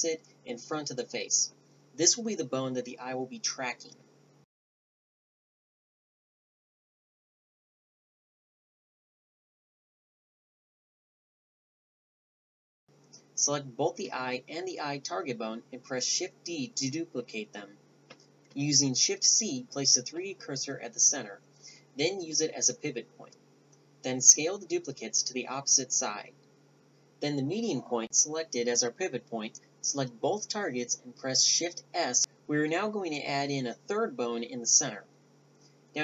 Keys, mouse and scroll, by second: 0.8 Tab, 1.1 a, 1.9 shift+d, 2.3 click, 3.1 click, 3.5 right click, 3.5 a, 4.1 s, 4.4 click, 4.6 ctrl+alt+s, 6.1 z, 6.3 click, 7.2 click, 8.2-10.2 drag, 10.6-12.5 drag, 12.5 shift+d, 13.7-15.4 drag, 16.7 shift+c, 19.2 g, 20.5 s, 24.7 scroll up 1, 24.8 middle click, 25.2 a, 25.8-26.9 drag, 27.9 shift+s, 30.5-31.9 drag, 31.9 middle click.